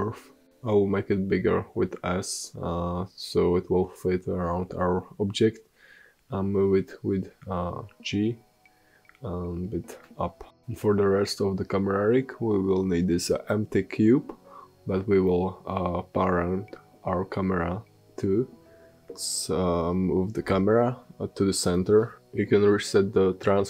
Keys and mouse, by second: 0.7 g, 5.7 s, 7.0 g, 10.3 shift+a, 14.0 s, 16.3-18.3 drag, 17.7 alt+g, 20.7 alt+s, 22.1-23.6 middle drag, 22.7 shift+s.